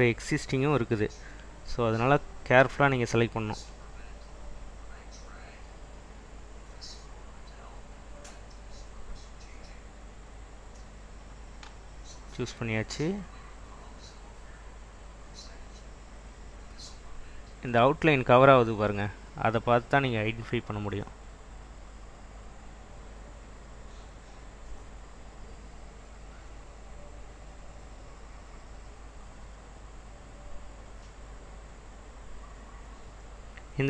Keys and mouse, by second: 0.6 Escape, 3.2-5.3 drag, 8.5 click.